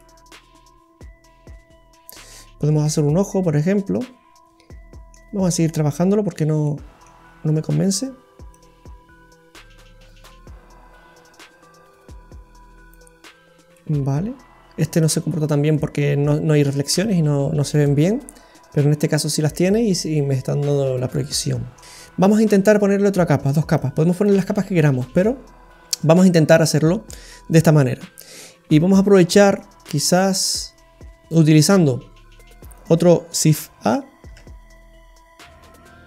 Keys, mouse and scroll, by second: 0.0 middle click, 5.7-6.0 scroll up 1, 6.3-6.6 scroll up 3, 6.6 middle click, 7.2-7.9 scroll up 4, 8.5 click, 13.7 middle click, 15.3-16.3 scroll up 3, 15.7 middle click, 17.5-18.1 scroll up 2, 17.8 middle click, 20.9-21.3 scroll down 2, 21.2 middle click, 22.5-22.9 scroll up 3, 22.9 middle click, 23.8 click, 27.4-27.8 scroll up 2, 27.8 middle click, 29.5 click, 31.3 click, 32.8 click, 34.3 shift+a.